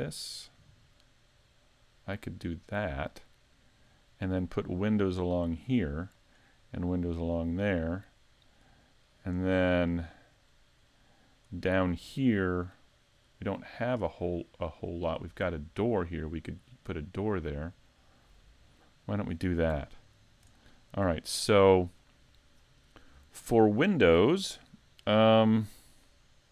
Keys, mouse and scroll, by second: 3.8 click, 9.7 middle click, 10.6-11.1 scroll down 2, 11.1 middle click, 19.6-20.6 scroll up 1, 20.6 shift+middle click, 20.6 scroll up 1.